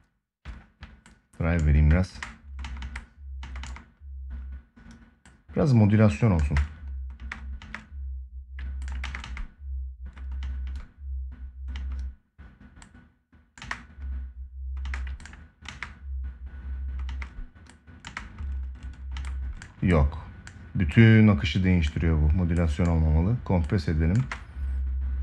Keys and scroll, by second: 1.8 space, 6.2 space, 8.7 space, 13.3 space, 14.6 space, 15.4 space, 16.8 space, 23.9 space.